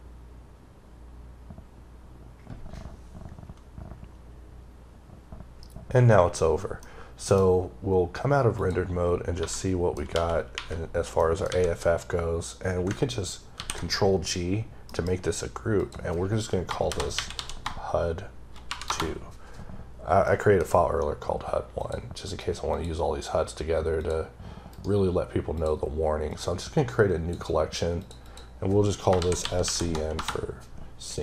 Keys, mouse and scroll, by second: 6.7 middle click, 8.4 click, 8.9-9.3 scroll down 3, 9.3-10.0 typing, 9.4 middle click, 11.0 middle click, 11.3 a, 11.7-12.7 scroll up 2, 13.4 g, 15.7 click, 16.8-17.5 typing, 18.7 Return, 20.1 scroll up 1, 20.2-20.8 scroll down 1, 21.7 click, 22.6 click, 24.6 right click, 25.4 click, 26.2 click, 28.1 double click, 29.1 shift+s, 29.3 shift+c, 29.8 b.